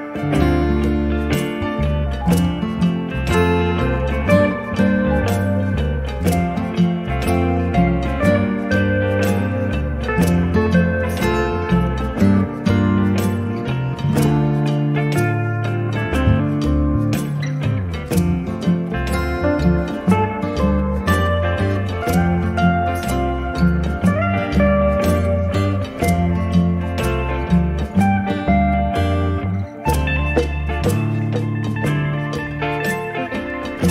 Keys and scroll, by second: 18.8 space, 21.3 m, 26.0 space.